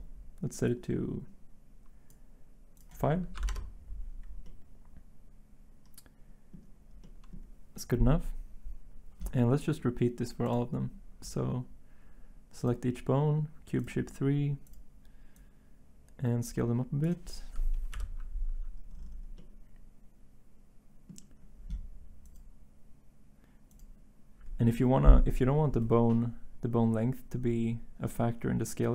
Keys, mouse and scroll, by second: 3.3 typing, 3.4 Return, 17.9 middle click, 18.9 middle click, 19.0 click, 19.0 middle click, 19.1 click.